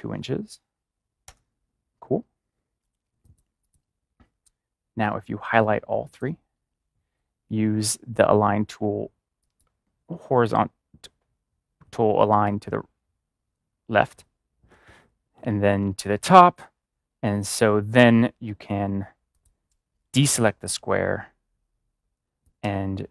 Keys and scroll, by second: 1.2 Return.